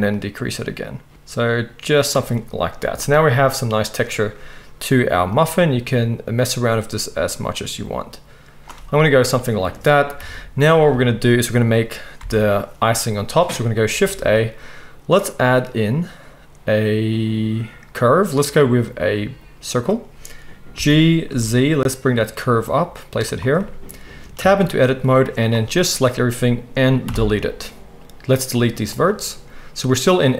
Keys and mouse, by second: 0.2-10.9 shift+middle drag, 0.2-2.1 shift+right drag, 10.1 KP_1, 12.2 alt+a, 14.0 shift+a, 20.7 g, 23.3-25.2 right drag, 24.4 Tab, 25.2-30.3 middle drag, 27.0 Delete.